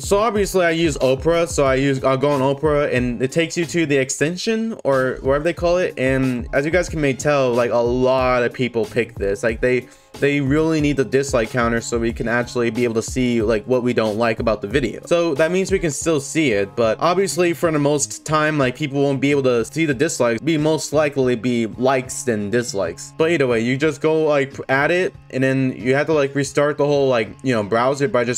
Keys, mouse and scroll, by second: 0.3 click, 1.7 click, 5.8 click, 10.4 click, 13.2 click, 16.1 click, 17.0 click, 20.6 click.